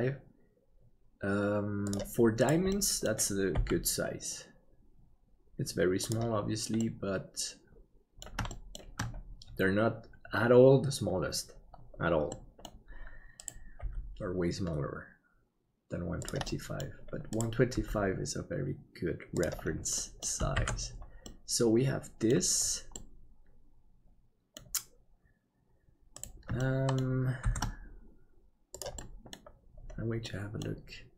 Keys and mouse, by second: 2.7 middle click, 3.5 g, 6.9-8.3 middle drag, 8.6 shift+middle click, 12.3 middle click, 13.8 g, 16.6 middle click, 17.3 right click, 17.7 g, 20.1 middle click, 20.6 alt+a, 21.2-22.3 middle drag, 22.9-24.5 middle drag, 26.6 shift+middle click, 27.5 shift+d, 30.3 middle click.